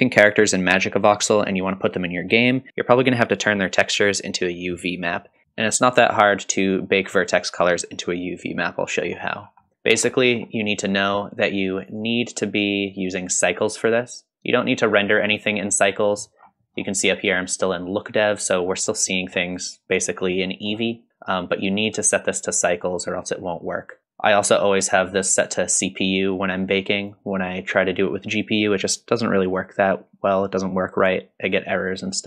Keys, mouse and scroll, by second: 5.4 click, 5.4-5.9 scroll down 2, 5.9 middle click, 6.7-7.3 drag, 8.5-9.0 middle drag, 9.4-10.1 scroll down 2, 9.7 middle click, 10.1 middle drag, 11.9-15.5 drag, 16.5-17.9 scroll down 4, 18.9-19.3 middle drag, 20.4 middle drag, 22.0 click, 24.3 click.